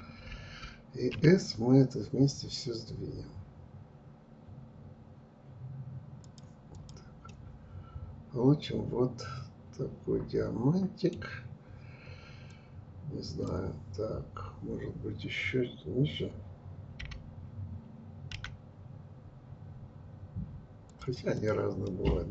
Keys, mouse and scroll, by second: 0.8 s, 6.4 click, 6.9-9.9 middle drag, 12.1-15.1 drag, 21.0 click, 21.4-22.3 middle drag.